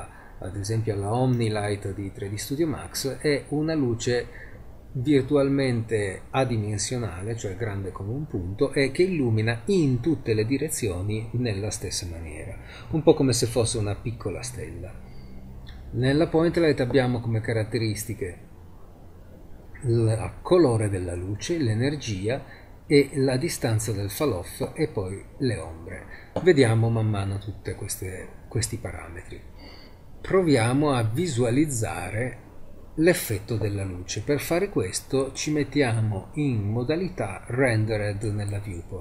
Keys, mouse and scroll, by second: 1.8-3.1 middle drag, 8.9-10.8 middle drag, 37.0-38.3 scroll up 2, 38.5-39.0 scroll up 1.